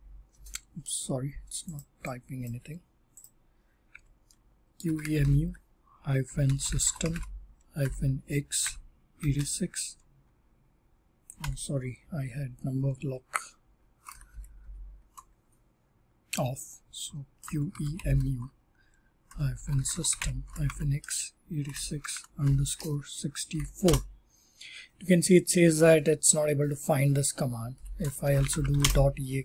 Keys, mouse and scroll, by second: 1.7 click, 2.4 click, 3.1 click, 3.6-9.3 typing, 6.7 click, 7.1 click, 11.4 Num_Lock, 14.5 typing, 17.1-24.5 typing, 25.7-26.8 typing, 28.0-29.1 typing.